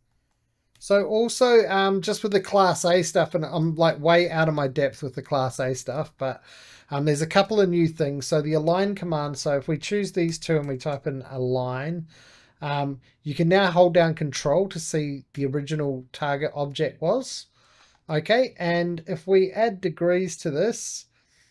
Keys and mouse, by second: 0.0 middle click, 0.6 e, 1.5 click, 2.2 right click, 3.0 2, 3.3 click, 4.1 x, 4.7 2, 5.1 click, 5.4-7.1 middle drag, 7.1 shift+middle click, 7.5 middle click, 8.4-10.2 shift+drag, 10.0-11.3 typing, 12.0-14.5 drag, 16.3-19.7 shift+middle drag, 19.7-21.5 drag.